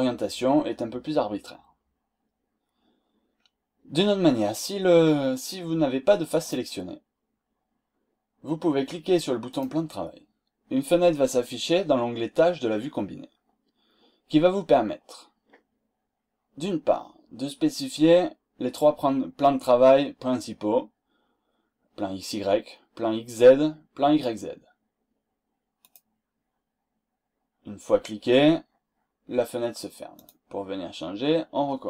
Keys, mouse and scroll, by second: 3.3-3.7 scroll down 2, 3.7-4.2 scroll up 2, 6.3 click, 9.5 click, 25.8 click, 30.2 click.